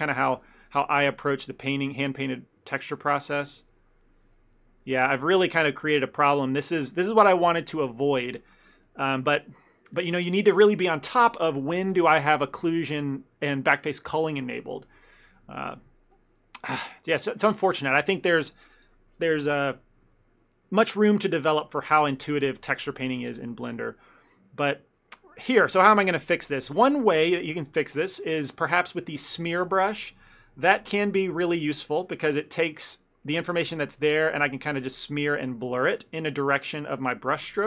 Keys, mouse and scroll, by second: 0.5 ctrl+click, 0.8 shift+middle click, 1.0 f, 1.4 ctrl+click, 1.5 ctrl+click, 1.9 middle click, 2.2 middle click, 2.4 shift+middle click, 2.7 ctrl+middle click, 3.1 ctrl+click, 3.4 ctrl+click, 3.8 ctrl+middle click, 4.1 middle click, 4.4 ctrl+middle click, 4.6 middle click, 5.0 middle click, 5.6 ctrl+middle click, 5.9 ctrl+middle click, 6.0 shift+middle click, 6.1 shift+middle click, 6.3 ctrl+middle click, 6.7 middle click, 8.9 ctrl+middle click, 9.2 ctrl+middle click, 9.7 ctrl+middle click, 12.3 click, 15.6 ctrl+middle click, 15.9 middle click, 16.2 middle click, 16.3 ctrl+middle click, 16.9 ctrl+middle click, 17.1 ctrl+middle click, 17.4 ctrl+middle click, 23.6 ctrl+middle click, 23.9 ctrl+middle click, 24.1 middle click, 24.3 ctrl+middle click, 25.1 ctrl+middle click, 30.1 click, 30.8 f, 31.2 click, 33.0 click, 33.0 middle click, 33.5 click, 34.5 middle click, 34.9 click, 36.7 shift+middle click, 37.0 shift+middle click, 37.4 click.